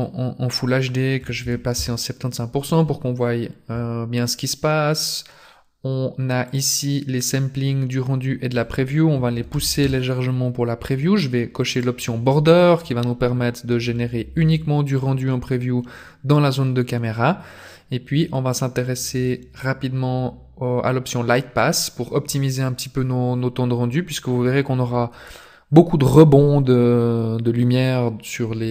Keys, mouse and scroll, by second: 5.1-5.5 scroll down 5, 6.5 click, 7.0 scroll down 1, 8.4 click, 11.7 click, 18.5 click, 19.1-19.8 scroll down 4, 19.9 scroll down 2, 22.3 scroll down 1.